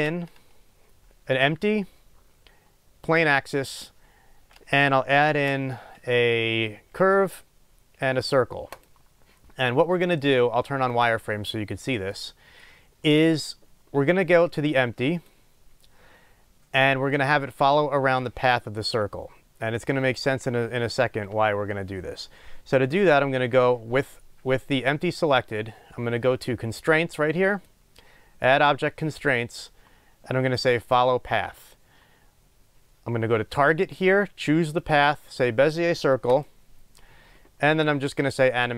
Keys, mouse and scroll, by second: 3.4 shift+a, 10.9 click, 12.3-15.2 middle drag, 12.8 scroll up 1, 15.2 click, 31.7-38.7 drag.